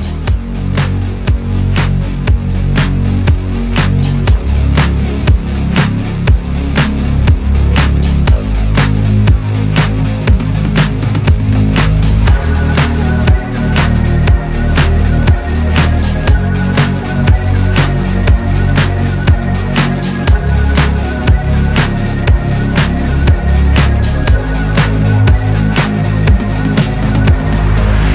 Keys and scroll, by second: 7.0 Return.